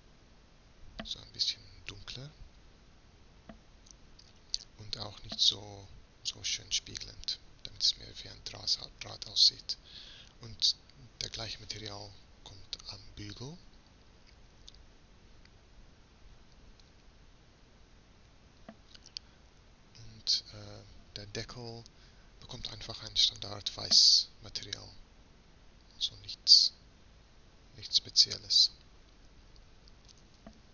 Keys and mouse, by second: 8.0-10.0 right drag, 10.0-15.6 middle drag, 15.6-18.3 drag, 19.4 right click, 21.4-30.7 drag.